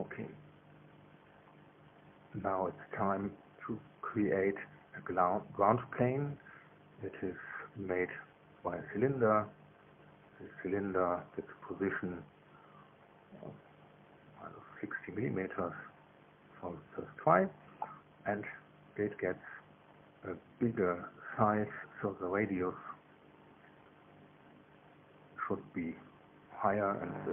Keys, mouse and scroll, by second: 4.4 click, 6.8 scroll down 1, 7.6 click, 11.0 click, 12.1 click, 13.4 KP_Subtract, 14.2 KP_6, 14.4 KP_0, 15.7 KP_Enter, 20.4-21.5 drag, 23.0 click, 27.2 KP_3.